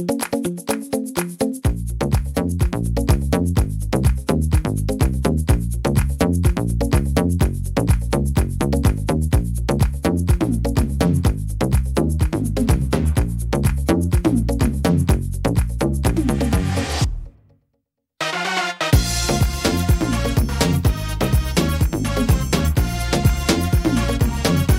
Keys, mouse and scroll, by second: 0.9 middle click, 1.5-1.8 scroll up 1, 1.8 middle click, 2.4-2.7 scroll up 1, 2.8 shift+middle click, 3.6 click, 5.0 click, 8.5 s, 11.4 middle click, 12.7 middle click, 13.0 scroll down 2, 13.4 middle click, 16.4 right click, 17.8 click, 19.4 middle click, 19.9-20.3 scroll down 2, 20.3 middle click, 21.3 scroll up 4, 21.6 shift+middle click, 22.0 scroll up 1, 22.8 right click, 23.7 click.